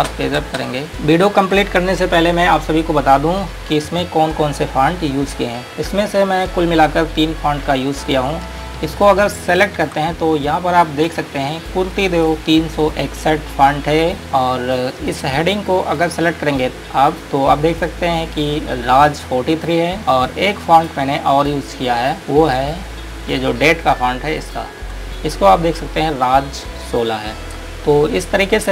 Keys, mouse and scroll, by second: 0.3 shift+Page_Up, 0.8 click, 1.8-2.3 scroll up 1, 8.3 ctrl+Num_Lock, 9.2 ctrl+click, 9.7 ctrl+click, 11.1 click, 14.2-14.7 scroll down 1, 15.4 click, 16.2-16.5 scroll up 1, 20.0 scroll down 1, 21.0 click, 22.0 scroll up 1, 24.1 ctrl+click, 24.7 click.